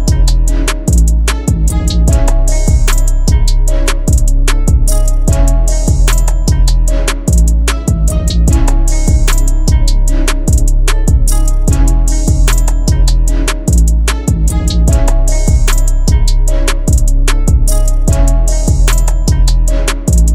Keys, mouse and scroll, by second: 3.1 alt+shift+click, 9.2 Return, 16.4 ctrl+t, 17.6 alt+shift+click.